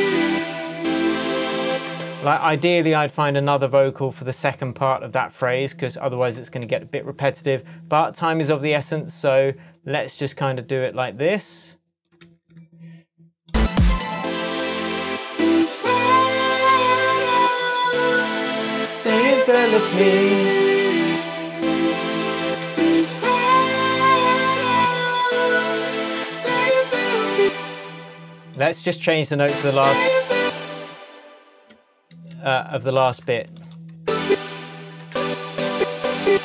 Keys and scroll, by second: 1.9 space, 12.2 super+d, 20.4 shift+Tab, 22.7 super+s, 27.4 space, 30.4 space, 32.2 super+e, 34.0 super+space.